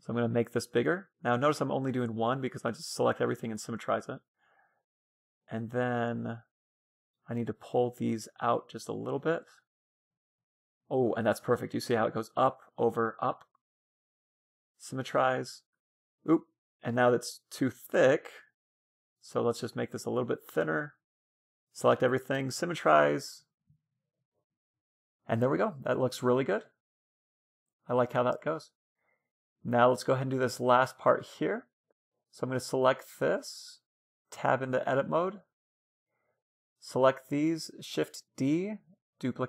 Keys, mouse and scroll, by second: 0.4-2.2 drag, 2.5-5.7 middle drag, 4.6 a, 6.4 c, 8.1-9.8 drag, 9.5 middle click, 11.5-12.0 scroll up 1, 12.7 a, 12.8 a, 13.2 middle click, 13.4 w, 15.0 Tab, 15.1-17.7 middle drag, 16.8 Tab, 18.0-20.1 middle drag, 18.4 a, 18.6 b, 20.2-22.0 drag, 21.0 a, 21.2 a, 21.6 w, 22.9-25.3 middle drag, 23.5 a, 24.4 Tab, 26.5 middle click, 28.9-33.3 middle drag, 32.3-34.6 right drag, 35.3 Tab, 35.9 a, 36.1 b, 37.6 shift+d.